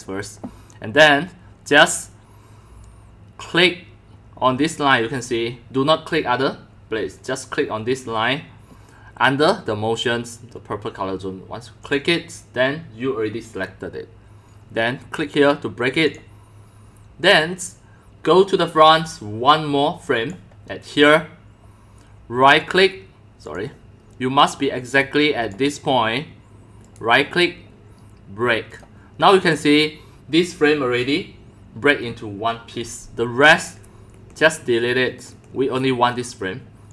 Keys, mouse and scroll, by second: 3.3-4.3 drag, 11.9 click, 16.1 click, 17.1-17.7 drag, 18.7-20.9 drag, 21.2 click, 22.7 right click, 23.5 click, 24.1 click, 25.0 click, 26.8 click, 27.0-28.8 right drag, 28.8-29.4 drag, 32.0-32.4 drag, 33.6 click, 34.1 Delete, 35.2-35.6 drag, 35.3 Delete, 35.6-36.0 drag.